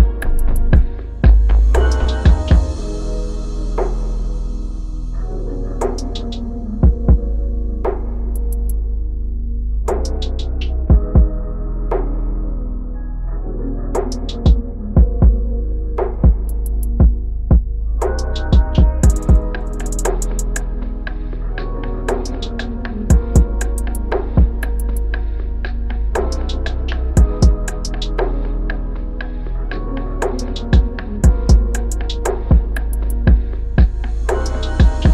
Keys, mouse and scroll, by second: 0.0 Down, 0.3 Down, 0.6 Down, 0.9 Down, 1.2 Down, 1.5 Down, 4.5 ctrl+-, 5.0 ctrl+-, 6.3 shift+Right, 6.9 shift+Right, 8.1 shift+Right, 16.9 ctrl+-, 17.2 ctrl+-, 22.6 double click, 28.0 ctrl+=, 28.3 ctrl+=, 28.6 ctrl+=, 31.5 shift+Up, 31.8 shift+Up, 32.1 shift+Up, 33.0 Down, 34.3 Down, 34.9 Down.